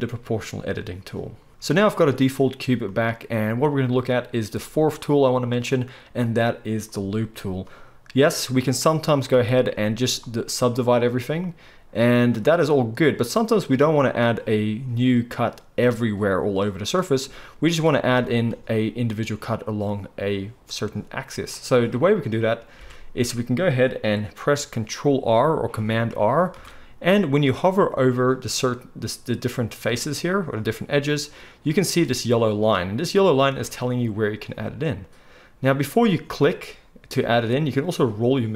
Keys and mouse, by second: 1.5-10.0 drag, 9.3 a, 18.0 ctrl+z, 22.4 click, 22.4 middle click, 22.4 right click, 22.8 alt+a, 26.5 ctrl+r.